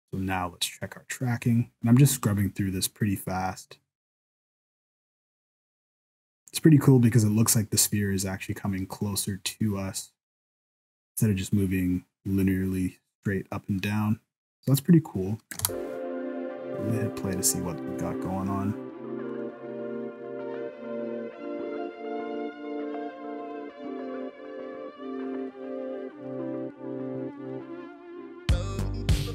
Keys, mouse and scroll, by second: 15.6 space.